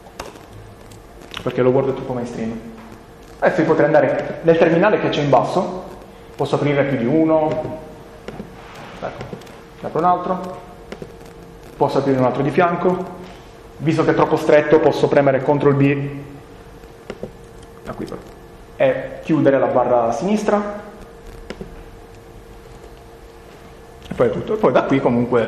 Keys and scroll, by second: 15.6 ctrl+b, 22.6 BackSpace, 24.1-25.0 typing.